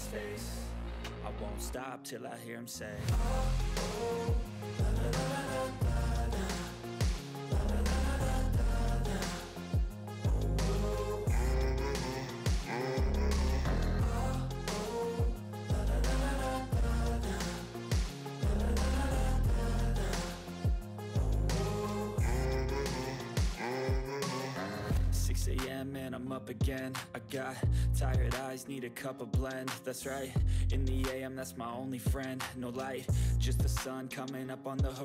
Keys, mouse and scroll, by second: 3.5-4.3 drag, 6.8-7.5 drag, 7.9 ctrl+g, 8.1 click, 8.4 ctrl+scroll down 1, 8.7 ctrl+middle click, 9.0-9.7 click.